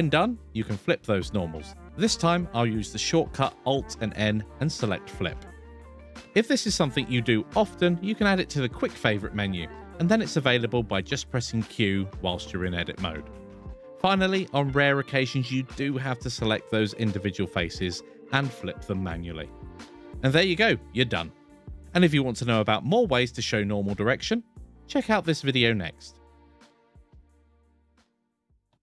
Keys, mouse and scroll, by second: 1.1 alt+n, 6.7 alt+n, 13.1 q, 14.6 shift+click, 15.1 shift+click, 15.8 shift+click, 16.5 shift+click, 18.1 shift+click, 19.2 q, 20.9 q.